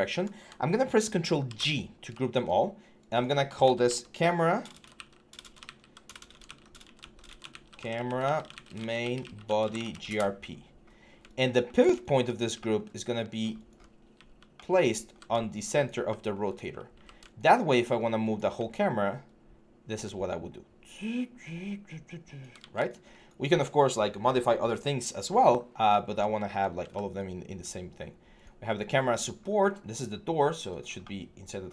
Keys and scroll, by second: 1.2 ctrl+g, 4.4-10.1 typing, 13.9-15.0 typing, 16.7 e, 17.3 6, 22.4 ctrl+z.